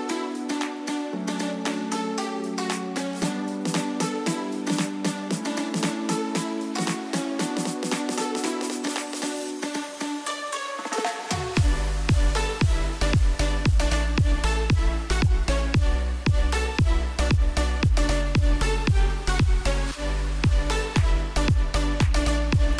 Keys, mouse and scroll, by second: 1.1 t, 1.3-9.1 drag, 12.2 Down, 15.5 alt+click, 17.7 t, 17.8 click, 22.3 click.